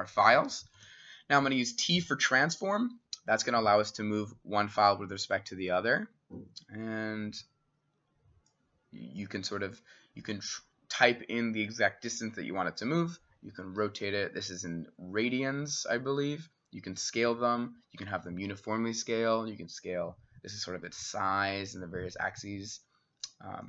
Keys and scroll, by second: 0.8 t.